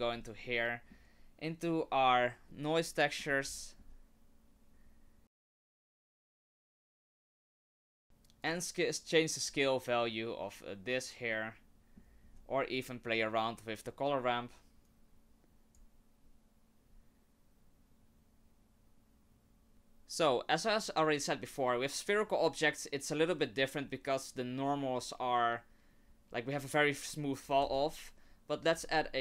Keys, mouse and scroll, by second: 0.5 middle click, 5.4 click, 6.5 click, 7.2 middle click, 8.4 click, 11.4 middle click, 12.3-13.6 scroll up 2, 14.9 click, 27.6 shift+a.